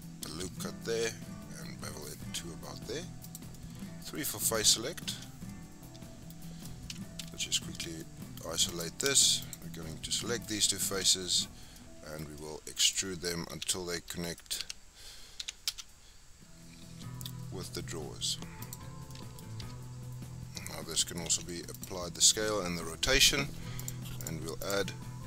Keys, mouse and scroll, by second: 0.3 ctrl+b, 3.5 scroll down 1, 3.5-5.1 middle drag, 5.1 3, 5.3 scroll up 2, 5.5-6.9 middle drag, 6.9 KP_Multiply, 7.2 KP_Divide, 7.9 scroll down 1, 8.0 middle click, 8.7 click, 9.4 shift+click, 9.7 scroll down 2, 9.9-11.0 middle drag, 11.0 KP_Divide, 11.7 middle click, 12.2 scroll down 1, 12.4-13.5 middle drag, 13.5 r, 14.6 e, 18.9 scroll down 3, 19.1 middle click, 19.6 Tab, 21.3 ctrl+a, 23.8 click, 24.2 click.